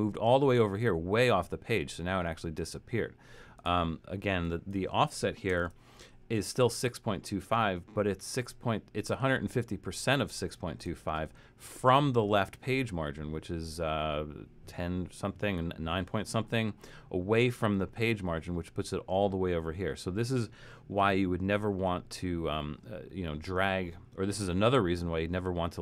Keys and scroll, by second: 5.6 shift+Return.